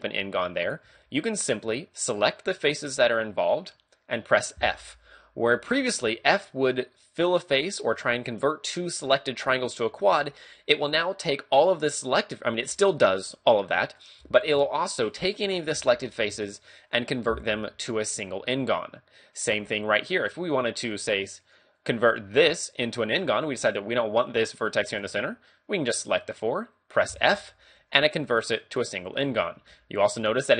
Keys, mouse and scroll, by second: 0.8 ctrl+Tab, 2.3 right click, 2.9 shift+right click, 3.4 shift+right click, 4.6 f, 5.5-6.1 scroll up 1, 6.1 shift+middle click, 18.2-19.3 scroll down 2, 18.5 middle click, 19.6 a, 20.4 right click, 20.9 shift+right click, 21.5 right click, 21.8 right click, 23.0-23.3 scroll down 2, 23.3 middle click, 27.2 f, 27.5-27.8 scroll up 3, 27.8 a, 29.6 ctrl+Tab.